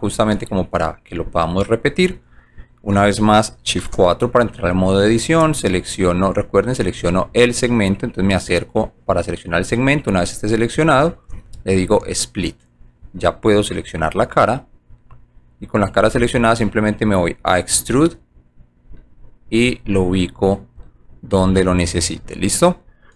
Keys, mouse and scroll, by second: 0.3 alt+right click, 1.0 alt+click, 1.4 alt+middle click, 2.2 alt+right click, 4.5 shift+click, 5.7 alt+click, 6.3 alt+right click, 6.9 alt+middle click, 8.1 alt+click, 8.7 alt+click, 9.8 alt+right click, 10.3 alt+click, 11.8 alt+click, 12.9 click, 13.3-14.8 alt+drag, 16.4 click, 17.6-18.8 drag, 19.3 alt+right click, 19.8 alt+click, 22.1 click.